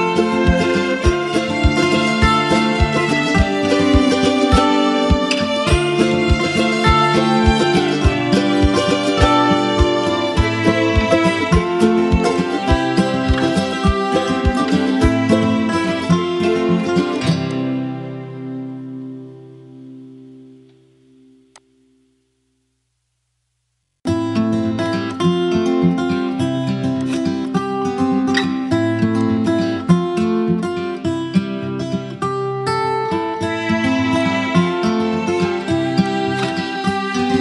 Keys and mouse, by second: 1.8 space, 1.9 click, 2.4 click, 2.6 space, 7.5 alt+space, 12.1 click, 15.8 click, 16.6 space, 16.9 click, 17.1-17.8 space, 21.2 click, 24.8 alt+click, 26.5 space, 26.7-27.3 click, 27.3 space, 27.6 p, 28.9-32.9 drag, 34.9 ctrl+z, 35.7-36.7 right drag.